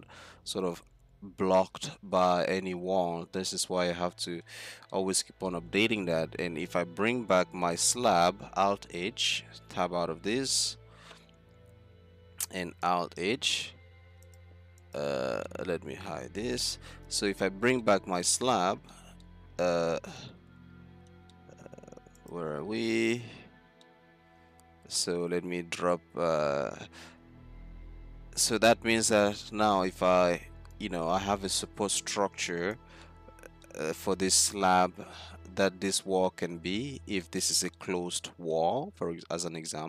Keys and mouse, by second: 0.0 z, 0.5 z, 1.6 e, 4.4 z, 8.0 alt+h, 10.5 Tab, 11.0 z, 13.1 alt+h, 16.6 h, 17.3 z, 20.3 z, 22.3 right click, 22.5 z, 23.5 z, 24.5 Tab, 25.4 z, 25.7 z, 28.7-29.9 middle drag, 33.4 middle click, 34.2 middle click, 36.6-38.1 middle drag, 39.7 z.